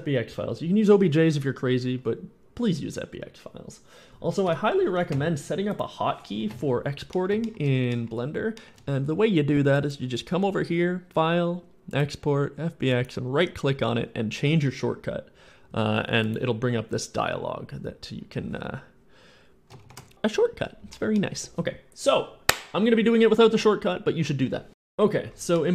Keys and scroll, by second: 4.3 Escape, 19.7 ctrl+shift+e.